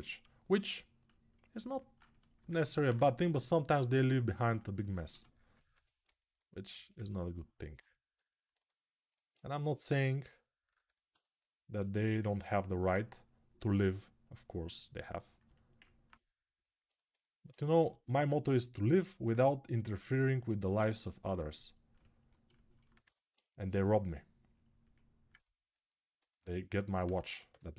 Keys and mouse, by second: 1.7-12.0 shift+drag, 4.3 shift+2, 17.5 g, 22.5-27.7 ctrl+alt+right drag, 27.3 6.